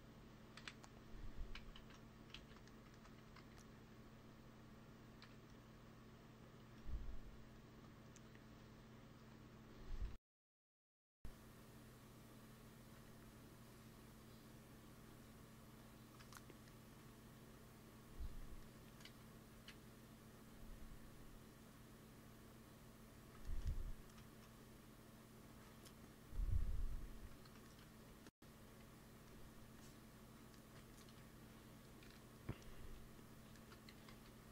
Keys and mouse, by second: 0.5 KP_1, 1.5 ctrl+z, 1.7 ctrl+z, 2.3 ctrl+z, 2.5 middle click, 3.0 g, 3.2 f, 3.8-5.0 drag, 5.1 KP_1, 7.4-11.0 drag, 9.9 Tab, 11.0-12.0 middle drag, 11.0 g, 12.5-19.4 drag, 12.8 Tab, 18.9 z, 19.4 z, 20.2 click, 23.5-25.4 middle drag, 26.7 middle click, 27.1 t, 27.3 click, 27.9 f, 28.7 f, 29.8 click, 31.9 KP_1, 33.8 g, 34.0 f.